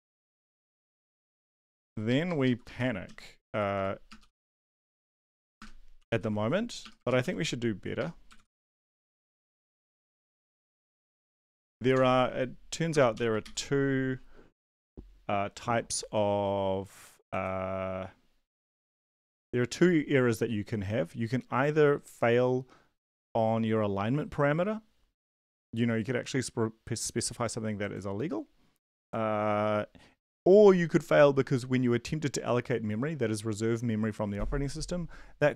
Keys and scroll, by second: 0.1 Right, 0.4 space, 0.8 0, 1.1 ctrl+Left, 1.3 ctrl+Left, 1.8 Left, 2.7 e, 3.0 Down, 3.4 Up, 4.2 BackSpace, 4.2 r, 4.4 Down, 4.6 Tab, 5.0 Tab, 5.7-13.1 typing, 11.4 Right, 11.5 Right, 13.4 ctrl+s.